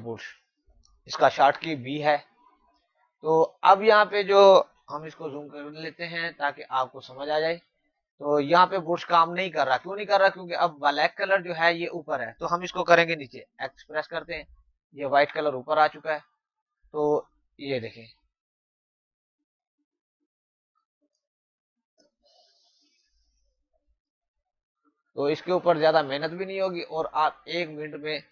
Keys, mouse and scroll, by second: 1.5 b, 4.8 ctrl+Num_Lock, 5.1-6.8 typing, 6.4 click, 8.0 click, 13.9 x, 16.0 click, 22.5 space, 22.8 click, 26.0 space, 26.2 click, 26.6 space, 27.0 click.